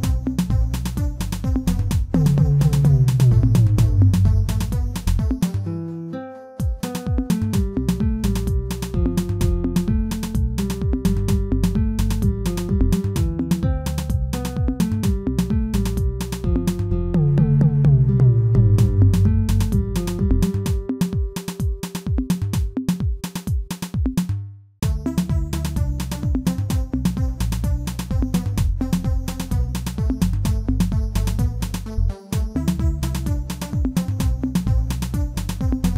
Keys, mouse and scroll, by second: 0.2 e, 4.1 e, 7.1 e, 9.3 shift+middle click, 9.8 e, 12.5 e, 14.6 s, 17.0 g, 18.5 s, 19.5 s, 20.3 e, 21.8 ctrl+z, 22.3 s, 27.8 e, 30.4 e, 31.4 s, 32.7 shift+middle click, 33.2 e.